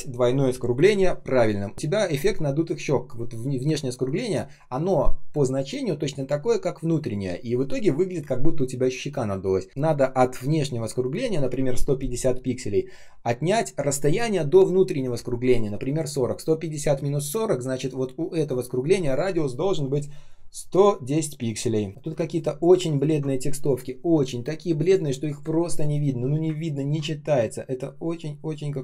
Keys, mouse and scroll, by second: 21.9 shift+0, 22.0 space, 22.6 space, 22.6 space, 22.9 ctrl+click, 26.5 ctrl+click.